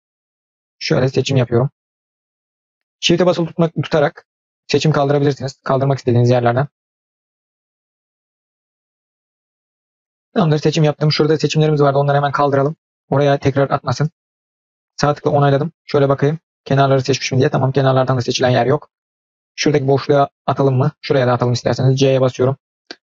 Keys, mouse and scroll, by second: 15.1-19.3 middle drag, 19.7-20.9 middle drag.